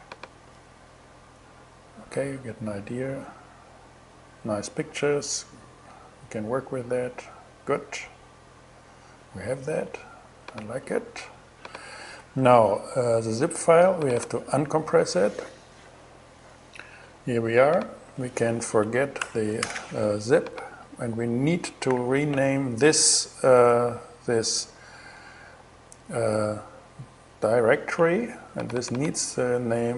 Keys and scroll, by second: 9.3 super+w, 18.8 super+BackSpace, 21.5 super+i, 29.4-29.9 typing.